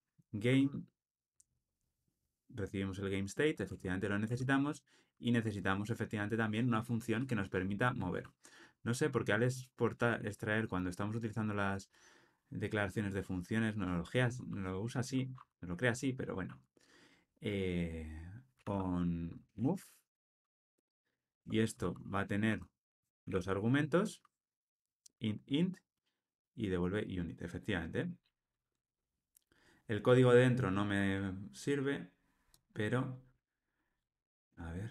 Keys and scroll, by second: 3.7 Tab.